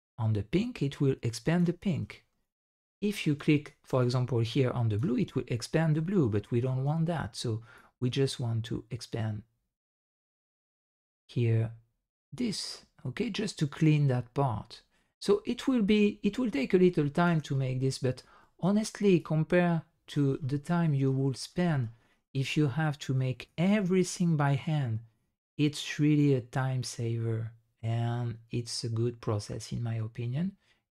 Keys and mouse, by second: 2.1 shift+middle click, 2.5 middle click, 3.1 shift+middle click, 5.6 ctrl+z, 6.4 shift+click, 7.7 ctrl+click, 17.5 click, 17.6 middle click, 17.7 click, 18.2 shift+middle click, 19.1 ctrl+click, 20.6 drag, 21.3 shift+click, 22.3 shift+click, 23.3 shift+click, 24.1 ctrl+click.